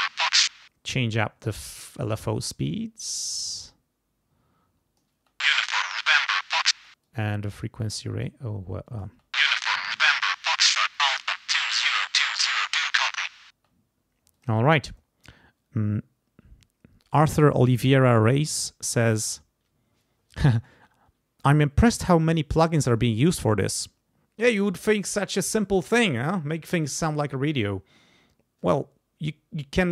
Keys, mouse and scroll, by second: 0.5 space, 1.2 click, 3.2-5.2 drag, 5.2 space, 6.8 space, 7.0 click, 7.9-9.2 drag, 9.1 space, 9.5 click, 10.4 click, 13.6 space, 14.3 click.